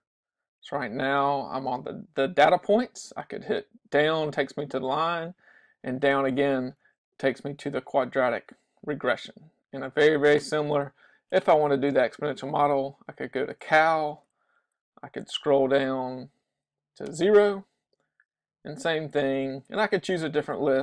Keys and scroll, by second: 0.1 Right, 0.7 Right, 1.4 Right, 3.3 Down, 4.8 Down, 6.9 Left, 7.1 Left, 7.2 Left, 7.4 Left, 7.7 Right, 7.9 Right, 8.1 Right, 8.3 Right, 8.4 Right, 11.2 Right, 14.5 Down, 14.7 Down, 14.9 Down, 15.0 Down, 15.2 Down, 15.3 Down, 15.6 Down, 15.8 Down, 16.1 Down, 17.1 Return, 18.1 Down, 18.5 Down, 19.0 Down.